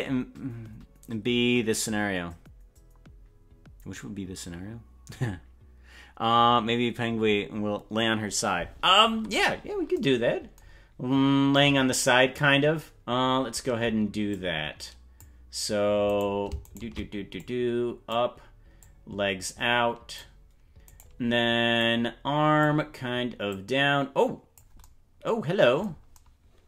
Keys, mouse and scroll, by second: 9.0-9.6 scroll down 8, 11.5 click, 14.2 click, 16.2 right click, 16.8 shift+right click, 17.3 click, 18.7-20.2 drag, 21.0 right click, 21.7 click, 23.4-24.6 drag.